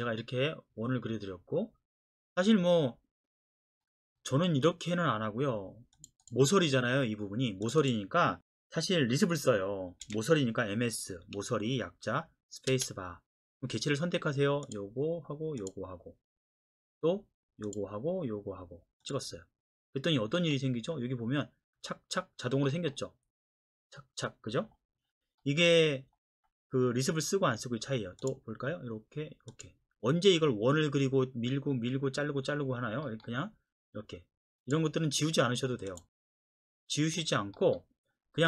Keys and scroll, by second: 10.1 m, 12.7 space.